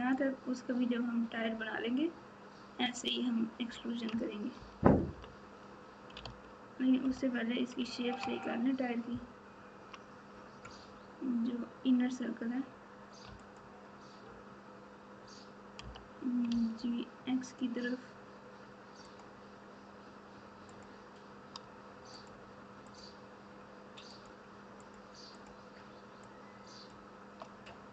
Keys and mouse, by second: 4.5 KP_4, 4.8 KP_4, 5.1 KP_4, 6.2 alt+z, 7.0 KP_Subtract, 7.5 KP_Subtract, 7.6 KP_Subtract, 7.7 KP_Subtract, 9.1 ctrl+KP_6, 13.4 alt+click, 15.8 g, 20.6 click, 22.1 shift+middle click, 22.5 shift+middle click, 24.8 shift+middle click, 25.3 shift+click, 26.4 shift+click.